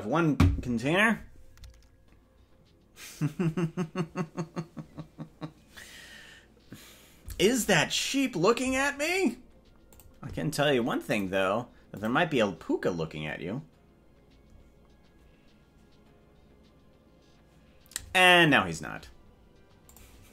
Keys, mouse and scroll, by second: 0.0-20.3 drag.